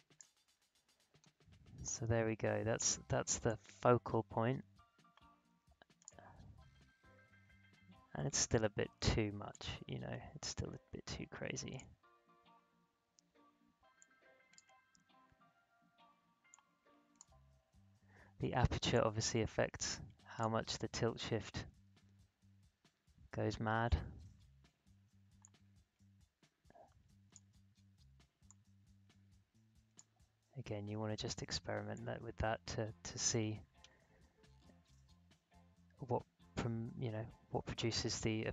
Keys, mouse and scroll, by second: 1.0 alt+scroll down 1, 3.4-9.1 drag, 9.5-16.5 drag, 16.5-22.0 drag, 22.0-22.4 alt+scroll up 1, 22.9 alt+scroll down 1, 25.4-31.9 drag, 31.9-34.3 drag, 34.3 alt+scroll up 1, 35.5 alt+scroll down 1, 36.3-37.1 alt+scroll up 1, 37.5-38.0 alt+scroll down 1.